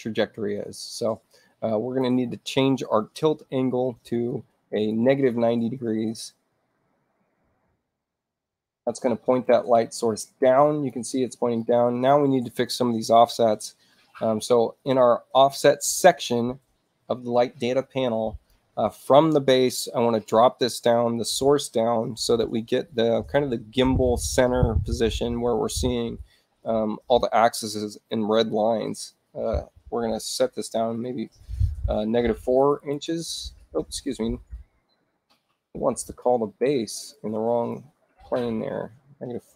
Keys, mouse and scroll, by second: 1.6 click, 4.1 9, 4.8 Tab, 6.5 click, 7.4-8.2 typing, 9.2-10.8 drag, 11.5 click, 18.0 click, 32.4 4, 32.8 Tab, 34.0 click, 37.1 click, 37.7 click, 39.3-39.5 typing.